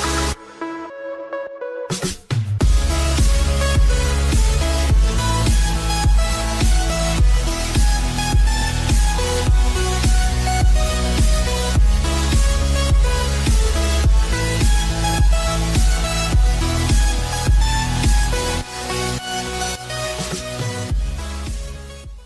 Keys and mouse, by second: 1.3 space.